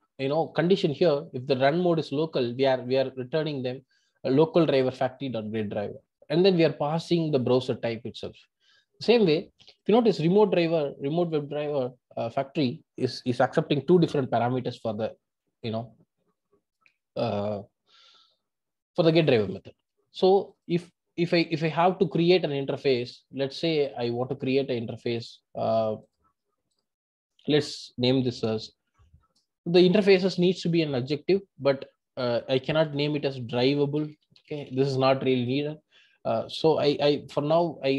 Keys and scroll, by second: 28.5 super+n.